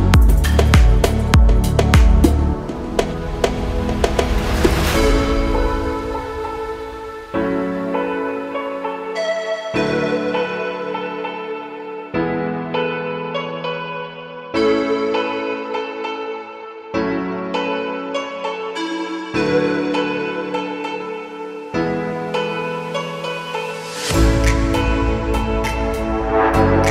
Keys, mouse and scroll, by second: 1.0 click, 1.7-2.5 scroll up 2, 3.1-4.5 drag, 8.1 click, 8.1 z, 9.2-10.4 drag, 11.1-11.6 shift+middle drag, 11.9 Tab, 12.3-12.9 middle drag, 13.5 3, 14.1 click, 15.0 shift+click, 15.4 shift+click, 16.1 KP_1, 16.7-17.2 scroll up 3, 17.2 shift+middle click, 18.8 click, 21.1 g, 21.3 z, 22.3 scroll up 1, 23.5 scroll up 9.